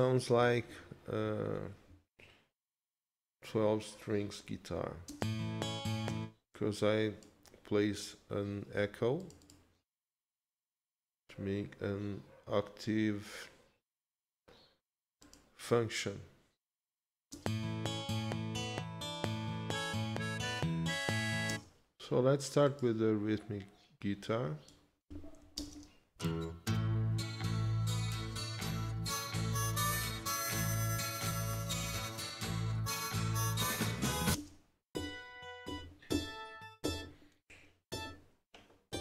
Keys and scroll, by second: 0.6 ctrl+s, 5.1 space, 17.3 space, 21.5 space, 25.6 ctrl+shift+space, 27.5 ctrl+s, 34.4 space.